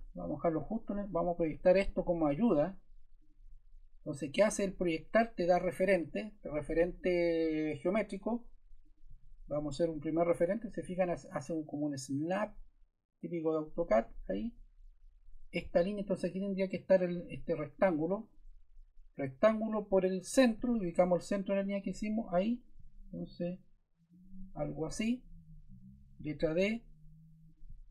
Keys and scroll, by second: 14.4 Escape, 24.9 Escape, 26.1 d.